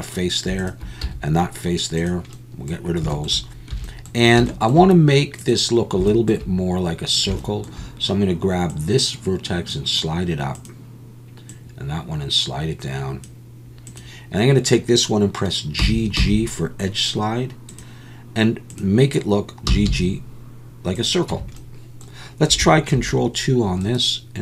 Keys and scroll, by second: 1.0 x, 3.7 1, 15.8 g, 16.2 g, 19.7 g, 19.8 g, 21.3 Tab, 23.0 ctrl+2.